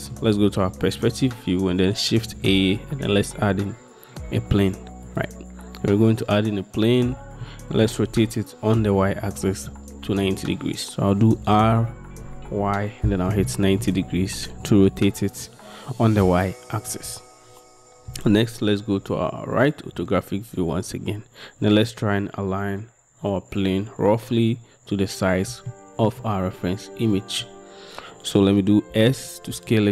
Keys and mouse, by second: 2.4 shift+a, 7.5-7.9 drag, 11.5 r, 12.5 y, 13.3 9, 13.5 0, 25.8-26.1 shift+drag, 29.0 s, 29.6 z.